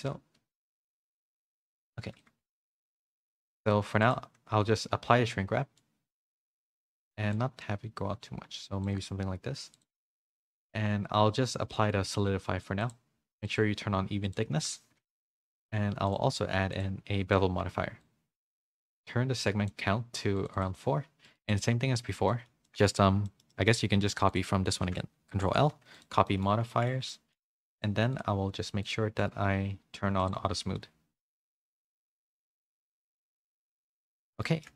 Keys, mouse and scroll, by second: 1.3 Tab, 1.5 middle click, 1.8 a, 1.9 a, 2.1 click, 2.4 shift+middle click, 3.1 middle click, 4.0 click, 5.8 middle click, 7.3-8.9 shift+drag, 9.7 click, 10.0 ctrl+a, 10.5 middle click, 11.7 middle click, 12.8 click, 13.4 click, 14.2 click, 14.5 ctrl+a, 16.1 click, 18.0-19.7 shift+drag, 20.4 click, 20.5 click, 22.3 middle click, 23.2 shift+middle click, 23.5 middle click, 24.3 shift+click, 25.3 ctrl+l, 26.2 middle click, 26.7 middle click, 27.1 middle click, 27.7 click, 28.1 click, 28.8-31.9 drag, 32.7 click, 33.6 middle click, 33.6 a, 34.1 a, 34.2 middle click, 34.6 shift+middle click.